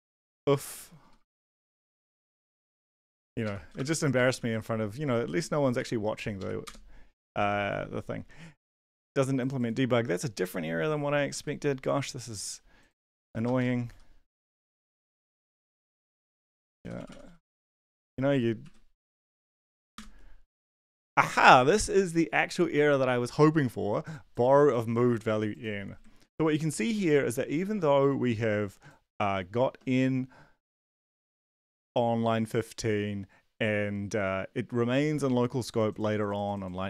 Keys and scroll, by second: 0.0-3.8 typing, 2.3 Left, 2.5 Left, 3.2 End, 3.4 Left, 4.1 Right, 4.4 ctrl+s, 5.8 ctrl+`, 6.4 Up, 6.6 Return, 11.3 ctrl+`, 13.2 Return, 13.6-17.6 typing, 16.0 Tab, 17.8 ctrl+s, 17.8 ctrl+d, 18.6 ctrl+`, 19.5 ctrl+l, 19.7 Up, 19.9 Return, 26.2 ctrl+`.